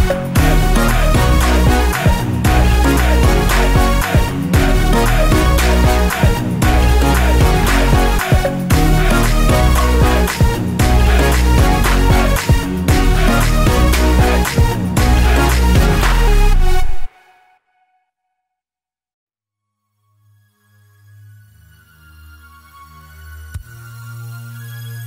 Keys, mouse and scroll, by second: 0.1 shift+z, 0.7 click, 1.1 g, 2.0 click, 2.3-5.3 middle drag, 2.7 scroll down 1, 2.9 shift+z, 4.7-5.3 scroll up 1, 5.3 click, 6.3 s, 7.7 click, 8.3-11.7 middle drag, 10.7 KP_5, 11.7 shift+right click, 12.8 shift+a, 13.5 r, 15.0 Return, 15.5 KP_7, 15.9-16.3 scroll down 1, 16.3 shift+z, 17.0 g, 18.2 click, 18.3-19.5 middle drag, 19.0 KP_5, 20.3-22.7 typing, 23.2 scroll up 1, 23.8 g.